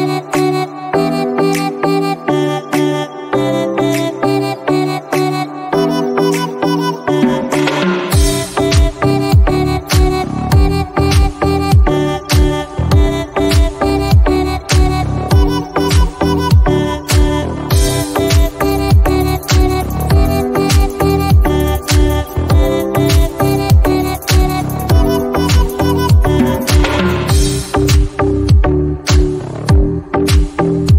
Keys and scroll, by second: 24.0 ctrl+d, 28.3 Delete.